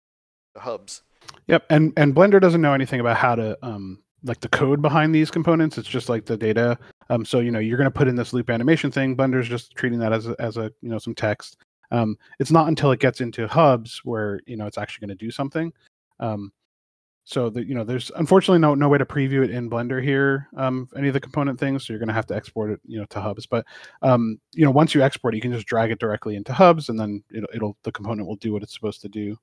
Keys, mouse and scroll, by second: 5.7 click, 11.5 click, 12.1 scroll down 1, 15.5 click.